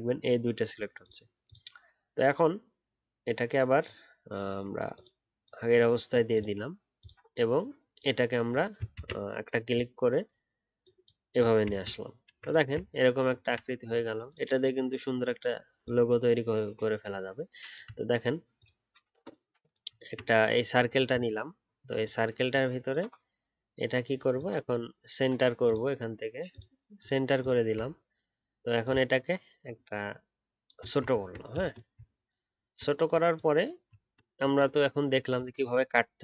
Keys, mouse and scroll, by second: 8.9 ctrl+z, 11.7-12.8 alt+scroll down 1, 12.8 alt+scroll down 3, 15.8 alt+click, 20.0-23.5 alt+scroll up 1, 27.9-28.8 alt+scroll up 2, 28.8 alt+click, 30.8 alt+shift+click, 31.1 alt+scroll down 2, 31.9-32.5 alt+scroll down 2, 32.5 alt+scroll up 1, 34.0 alt+scroll up 1.